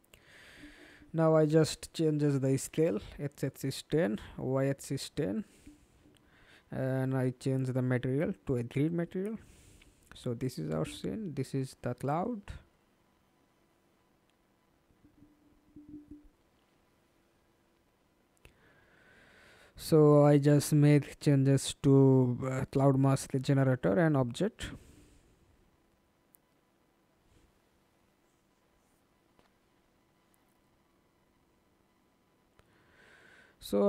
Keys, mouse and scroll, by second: 0.4-1.3 typing, 2.7-3.7 typing, 5.4-6.7 typing, 8.9 alt+right click, 9.6 alt+click, 10.6 alt+click, 11.1 f, 12.2-12.8 scroll down 1, 12.2 f, 12.8 scroll down 1, 12.9 alt+click, 16.3-16.7 scroll down 1, 22.0-25.3 scroll up 3, 25.5 middle click, 31.2 f, 31.9 alt+click.